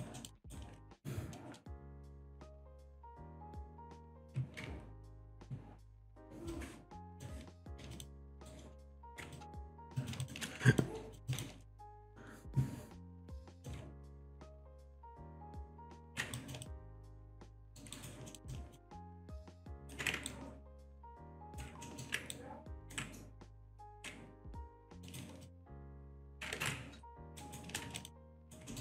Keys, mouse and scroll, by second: 0.2 alt+middle click, 0.4 alt+right click, 1.1-1.6 scroll down 1, 6.5 click, 7.6 alt+click, 8.0 alt+shift+click, 8.5 ctrl+right click, 9.4 alt+click, 10.0 alt+click, 10.2 alt+shift+click, 10.8 alt+click, 11.3 alt+shift+click, 13.2 click, 14.7 click, 15.0 alt+click, 16.1 ctrl+z, 16.4 alt+click, 16.7 alt+shift+click, 17.7 alt+middle click, 18.0 alt+right click, 18.3 alt+middle click, 19.0 alt+click, 19.3 alt+shift+click, 19.7 alt+right click, 20.3 ctrl+right click, 21.9 alt+middle click, 22.3 ctrl+right click, 23.5 click, 24.0 ctrl+z, 24.8 click, 25.1 alt+right click, 25.5 alt+click, 26.2 alt+click, 26.6 ctrl+z, 27.1 alt+click, 27.4 alt+shift+right click, 28.0 alt+shift+click, 28.4 alt+right click, 28.7 alt+middle click.